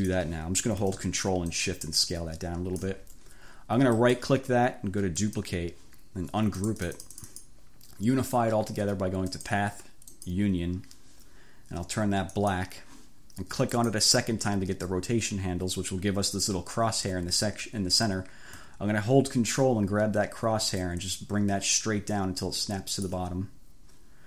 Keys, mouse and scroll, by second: 0.0 click, 1.6-3.1 ctrl+shift+drag, 5.2 click, 6.6-7.7 drag, 9.4 click, 10.2 click, 12.4 click, 13.8 click, 20.8-23.4 ctrl+drag.